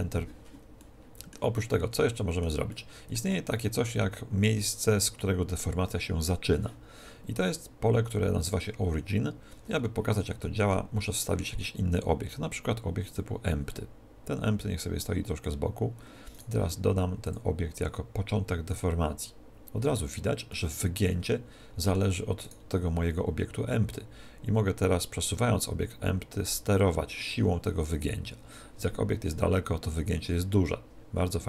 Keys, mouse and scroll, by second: 0.8-10.4 middle drag, 10.4 shift+a, 15.0 click, 16.3 right click, 17.2 click, 20.5-22.4 middle drag, 22.4 right click, 23.9-25.7 drag.